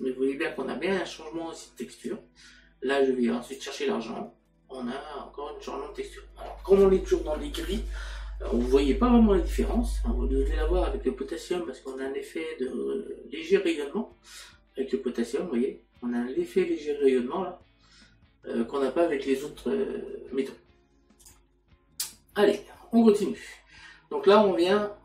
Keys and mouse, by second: 21.2 click, 23.6 middle click.